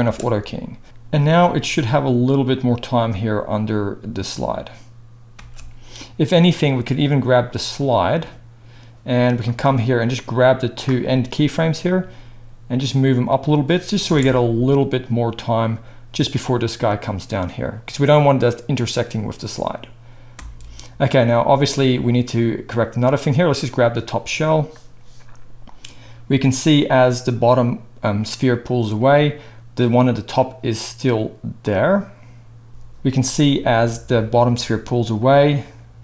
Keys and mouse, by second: 0.0 space, 0.8-6.9 drag, 5.4 space, 6.9 middle click, 7.7-13.4 drag, 12.0 g, 13.4 middle drag, 13.6-23.7 drag, 14.0 space, 20.3 space, 23.7-25.7 middle drag, 25.7-36.0 drag.